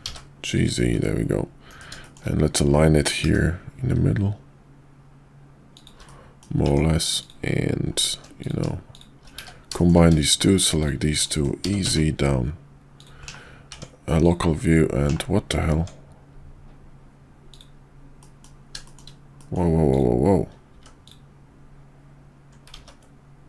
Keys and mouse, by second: 0.9 `, 1.6 KP_5, 2.0 shift+middle click, 3.2 g, 6.2 middle click, 6.6 Tab, 8.3 click, 9.3 1, 9.7 shift+middle click, 11.2 middle click, 11.6 e, 13.2 /, 13.7 Tab, 15.0 /, 15.7 Tab, 18.1 middle drag, 18.7 shift+middle drag, 19.4 middle click, 20.7 x, 22.8 ctrl+z.